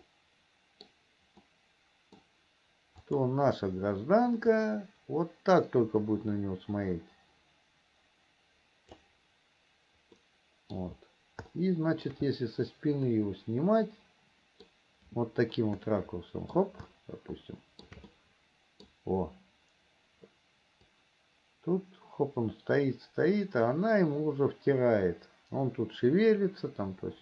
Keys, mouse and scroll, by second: 0.4 middle click, 1.8 middle click, 3.4 click, 4.8-9.4 drag, 10.4 middle click, 11.9 shift+middle click, 13.4-15.1 middle drag, 15.8-17.0 shift+middle drag, 15.8 scroll up 1, 17.3 shift+middle click, 18.4 middle click, 21.3-27.2 drag.